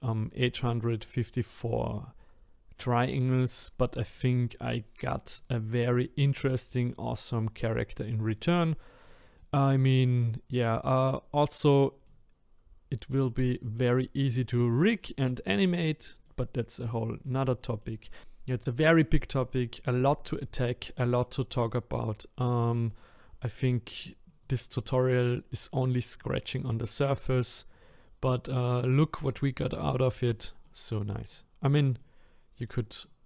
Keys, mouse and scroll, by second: 3.4 click, 3.9-5.3 middle drag, 5.3 click, 6.1-12.8 middle drag, 12.8-13.2 scroll down 1, 13.2-15.8 middle drag, 15.8-16.2 scroll up 3, 16.2 middle click, 16.8-17.2 scroll down 2, 17.2 middle click, 18.1 scroll up 2, 18.2-24.4 middle drag, 24.4 click, 25.2-25.8 scroll up 1, 25.8-27.9 scroll down 1, 27.9 middle click, 28.7-29.3 scroll down 1, 29.3-33.2 middle drag.